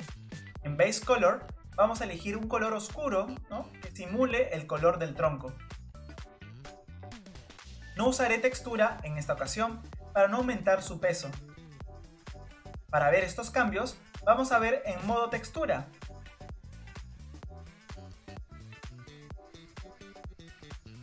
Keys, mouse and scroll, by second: 2.6 click, 16.5 click, 17.2 scroll up 1, 17.2-18.2 middle drag, 18.6 click, 20.5 click, 20.8-21.0 middle drag.